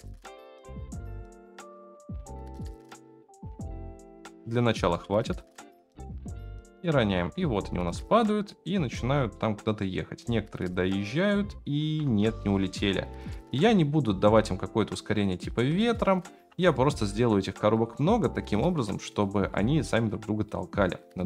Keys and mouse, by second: 0.0-0.6 typing, 2.2 shift+d, 2.8 r, 3.5 g, 4.8 space, 6.3-6.9 shift+middle drag, 7.5-8.6 shift+middle drag, 9.3-9.9 shift+middle drag, 12.1 space, 12.9-15.5 drag, 15.9 shift+middle click, 16.7 shift+middle drag, 17.7 click, 19.1-19.6 shift+drag, 19.8 shift+click, 20.4 shift+click.